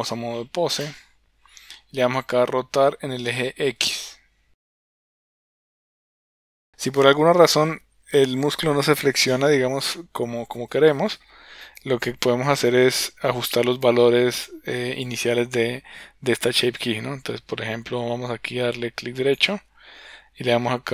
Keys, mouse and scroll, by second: 2.5 r, 11.8-12.7 drag, 13.8 click, 19.3-20.9 right drag.